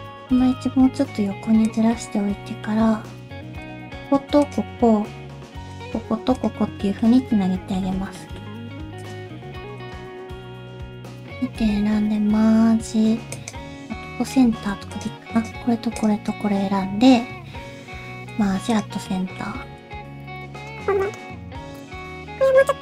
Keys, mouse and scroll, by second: 0.2 g, 1.9 middle click, 2.8-3.2 scroll up 2, 3.3 1, 3.6 click, 4.4 click, 5.3 alt+z, 5.7 click, 6.3 click, 6.8 shift+middle click, 7.1 middle click, 7.8 alt+z, 8.1 middle click, 9.0 click, 9.8 shift+click, 11.6 m, 14.0 middle click, 14.5 alt+z, 14.9 click, 15.3 shift+click, 16.0 shift+click, 18.3 m, 19.0 middle click, 19.6 shift+middle click, 19.9 alt+z, 20.2 click, 20.3 shift+click, 20.6 middle click, 20.8 shift+r, 21.3 middle click, 21.3 shift+middle click, 21.5 middle click, 21.7 click, 21.9 shift+click, 22.1 middle click.